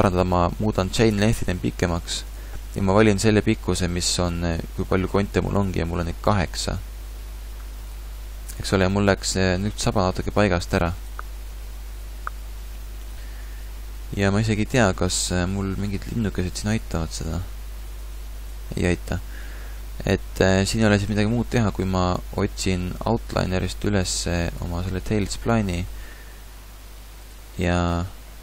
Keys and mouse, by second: 5.7-7.5 drag, 7.9-12.8 drag, 14.7-21.1 drag, 21.1-22.8 middle drag, 23.3-25.3 drag, 26.3 Tab, 27.9 middle click.